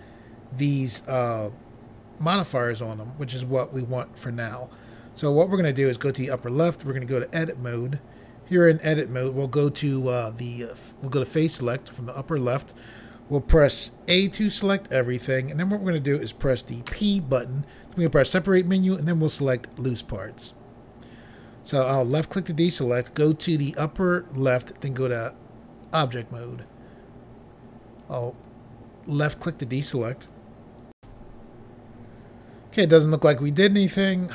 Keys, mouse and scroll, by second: 6.2 click, 7.2 click, 10.7 click, 14.0 a, 16.8 p, 19.7 click, 21.9 click, 24.3 click, 25.8 click, 26.0 click, 29.1 click, 31.0 Pause.